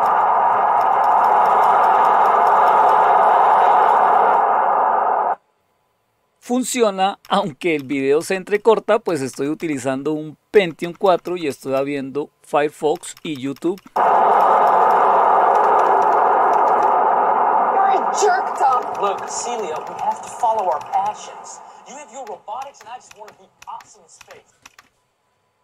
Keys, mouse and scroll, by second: 0.0 Up, 0.8 Up, 1.0 Up, 1.2 Up, 1.8 Up, 2.0 Up, 2.4 Up, 2.7 Up, 2.8 Up, 7.2 Up, 7.7 Up, 8.2 Up, 8.5 Up, 9.0 Up, 9.6 Up, 10.5 Up, 10.8 Up, 11.0 Up, 11.2 Up, 11.4-12.6 Up, 13.3 Up, 13.7 Up, 13.9 Up, 14.6 Up, 14.9 Up, 15.5 Down, 15.7 Down, 16.0 Down, 16.5 Down, 16.7-18.5 Down, 18.9 Down, 19.1 Down, 19.4 Down, 19.9 Down, 20.2 Down, 20.8 Down, 21.0-22.2 Down, 22.6 Down, 23.6 Down, 24.2 Down.